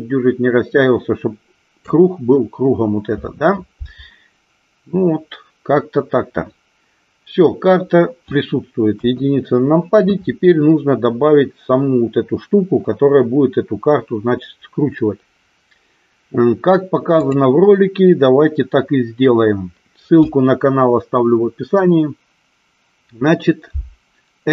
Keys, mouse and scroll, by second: 8.9 KP_1, 17.3 click.